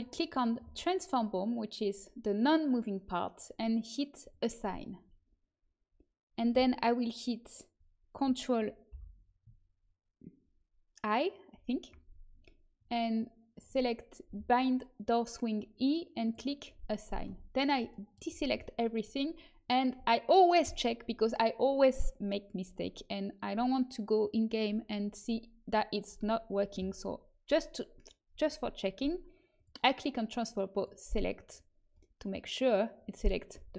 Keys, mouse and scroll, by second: 0.0-1.8 drag, 4.1-8.8 drag, 8.8 ctrl+i, 13.5-18.0 drag, 17.2 a, 29.5-32.7 drag, 33.5 a.